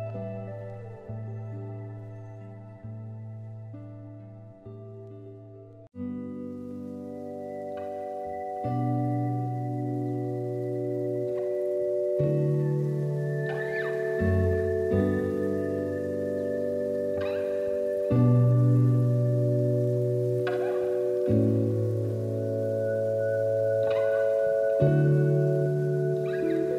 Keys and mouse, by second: 0.3-1.2 middle drag, 1.7 shift+middle drag, 2.0 middle click, 2.5 shift+click, 2.7 shift+a, 4.2 shift+a, 5.9 middle drag, 6.8 s, 9.2-9.6 middle drag, 10.1 click, 10.9 middle click, 11.9 s, 13.6 g, 15.5 s, 17.1 r, 18.9 g, 20.2 r, 21.7 click, 22.2-23.9 drag, 22.9 KP_0, 24.2 middle click, 25.7 click.